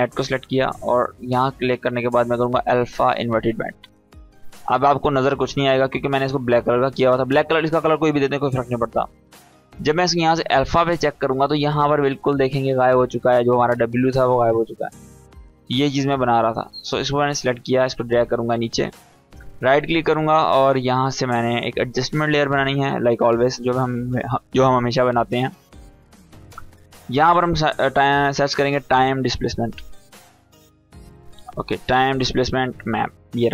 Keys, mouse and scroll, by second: 0.7 click, 3.2 click, 10.4 click, 11.5-12.1 drag, 15.2 click, 16.8 shift+click, 17.2 click, 18.8 right click, 19.3 click, 22.1 click, 24.7-25.6 drag, 27.2-28.6 typing, 30.6-32.1 scroll down 1, 32.1-33.5 drag.